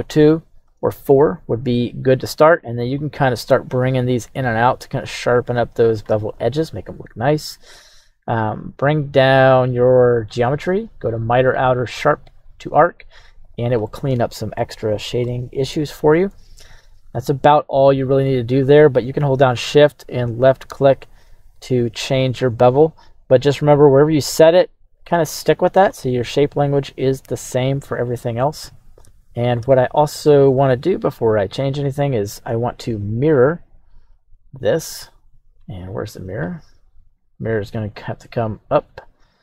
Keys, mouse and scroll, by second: 0.0 click, 0.2 click, 2.2-6.0 shift+drag, 7.6 click, 8.3 click, 9.8 click, 11.4-12.4 drag, 13.8-14.6 middle drag, 15.2 middle click, 18.0 scroll up 1, 20.4-25.0 shift+drag, 25.9 middle click, 27.8-29.0 scroll down 2, 29.6 shift+middle click, 31.6-33.6 drag, 36.6-37.9 scroll down 1, 37.9-39.4 drag, 37.9-39.4 scroll down 3.